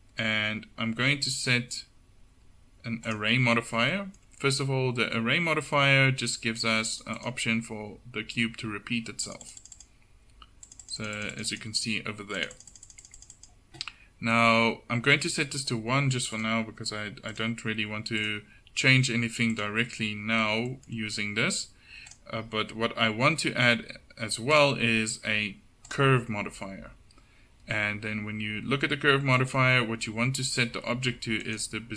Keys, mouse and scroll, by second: 4.4-18.5 drag, 21.1-31.6 middle drag.